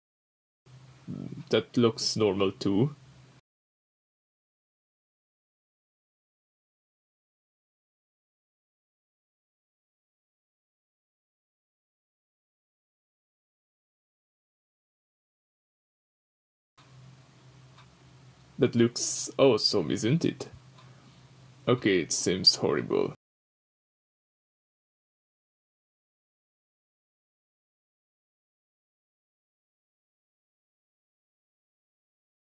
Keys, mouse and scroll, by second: 0.0-1.8 drag, 1.8-2.3 middle drag, 2.3-2.9 scroll up 3, 4.1 middle click, 4.1 scroll down 1, 4.5-4.8 middle drag, 5.5-6.6 middle drag, 5.5-6.0 scroll down 2, 6.0-6.6 scroll down 1, 6.6-10.2 drag, 11.9-20.1 drag, 15.6-16.7 scroll down 2, 16.7-17.4 scroll down 1, 20.1-21.6 middle drag, 21.6-24.4 middle drag, 22.6-24.4 scroll up 2, 24.4-25.9 drag, 25.9-31.9 middle drag, 27.5 scroll down 2, 28.8-29.2 scroll up 2, 29.2-31.9 scroll down 2, 31.9-32.4 drag.